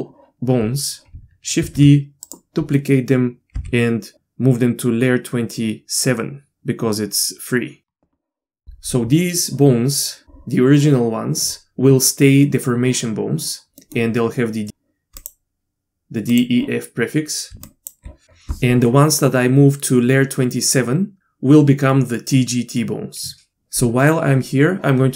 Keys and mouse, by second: 1.6 shift+d, 2.8 middle click, 3.5 m, 13.8 middle click, 15.2 click, 17.5 d, 17.6 click, 18.5 d.